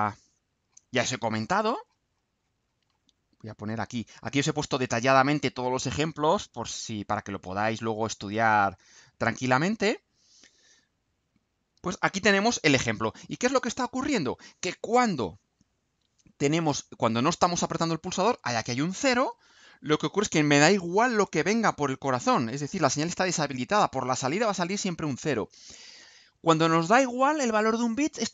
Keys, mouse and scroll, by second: 0.6-2.8 scroll down 1, 2.8 middle click, 4.2-12.2 drag.